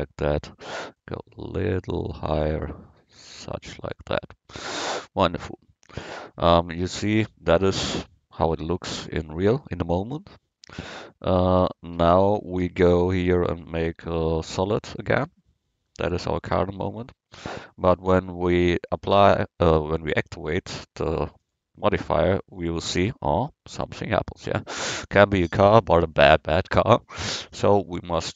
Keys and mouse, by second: 1.0-3.7 drag, 6.1 Tab, 22.8 middle click.